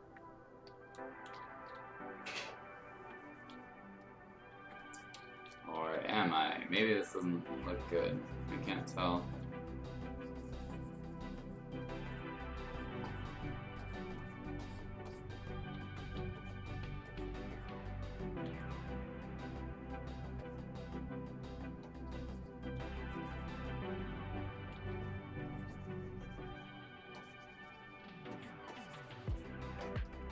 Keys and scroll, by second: 0.8 space, 2.9 x, 4.5-7.0 typing, 15.8 ctrl+z, 16.2 x, 18.5 x, 22.8 x, 24.7 x.